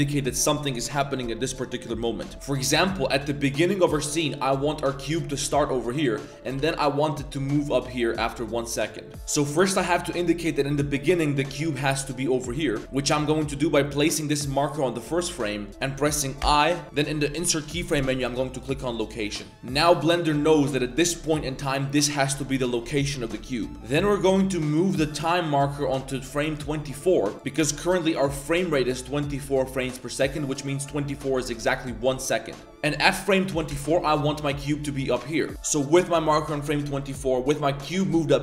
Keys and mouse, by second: 3.9 drag, 5.5 shift+drag, 6.0 click, 6.3 g, 9.1 ctrl+z, 9.1 click, 11.0 g, 13.4 click, 15.5 middle click, 16.4 i, 20.0 middle drag, 20.6 middle click, 21.8 g, 23.8-25.1 drag, 25.1 middle click, 26.3 middle click, 28.1-31.3 middle drag, 33.5 g, 34.6 middle click, 35.2 shift+click, 37.1 click.